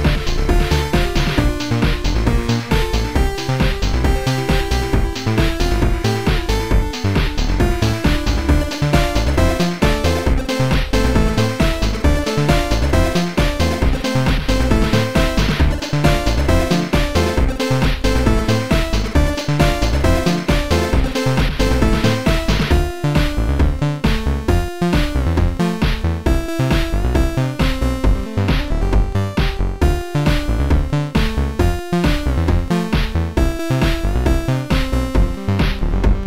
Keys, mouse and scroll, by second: 5.6 ctrl+z, 6.8 click, 9.0 ctrl+z, 9.0 click, 9.9 ctrl+z, 9.9 click, 10.8 click, 11.6 ctrl+z, 12.7 click, 14.3 click, 15.5 click, 17.2 click, 18.0 click, 22.0 click, 22.3 click, 23.3 click, 25.2 click, 26.8 click, 27.8 click, 28.8 click, 31.6 click, 31.6 click, 31.8 click, 34.2 click.